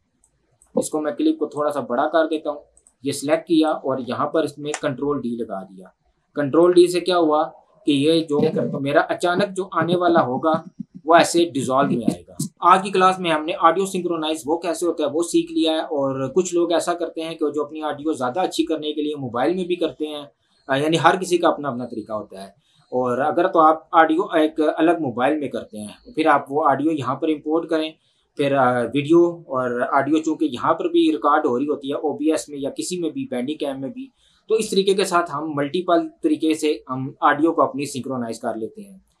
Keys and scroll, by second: 4.9 ctrl+d, 8.3 space.